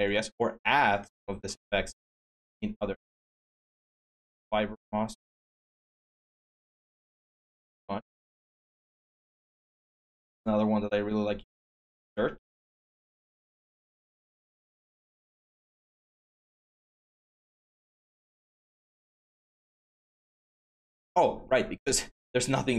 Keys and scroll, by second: 8.6 BackSpace, 8.9 BackSpace, 9.2 BackSpace, 18.4 x.